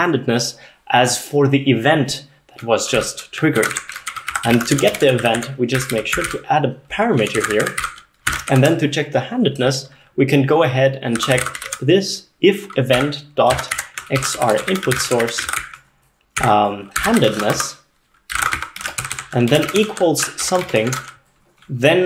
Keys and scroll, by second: 3.0-9.1 typing, 11.0-20.5 typing, 20.9 ctrl+alt+7, 21.0 ctrl+alt+0, 21.9-22.0 typing.